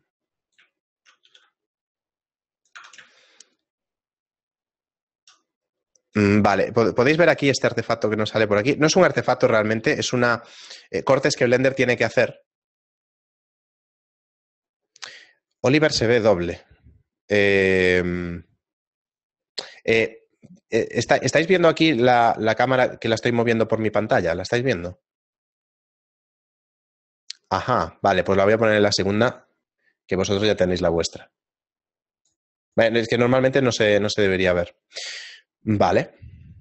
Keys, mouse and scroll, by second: 0.5 right click, 1.0 shift+middle click, 1.3 g, 2.8 Tab, 3.1 shift+middle click, 5.8 middle click, 6.3 shift+middle click.